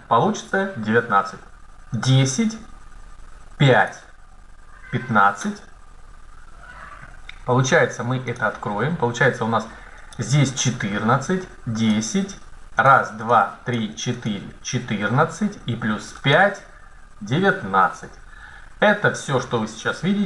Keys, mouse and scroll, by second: 2.0 right click, 2.8 click, 8.2-9.2 drag.